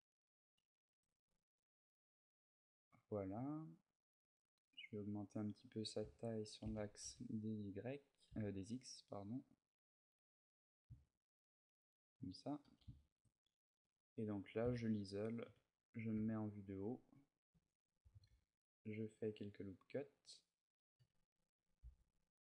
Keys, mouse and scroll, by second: 0.1 middle click, 0.7 z, 1.0 middle click, 4.5 middle click, 5.8 a, 6.4 s, 11.7 shift+click, 12.0 middle click, 12.4 a, 12.7 shift+middle click, 13.6 Tab, 14.4 KP_Divide, 15.2 KP_7, 16.1 ctrl+middle click, 17.3 Tab, 17.9 ctrl+r, 20.0 click, 20.3-20.8 scroll up 3, 20.7 a, 21.3 z, 21.6 b.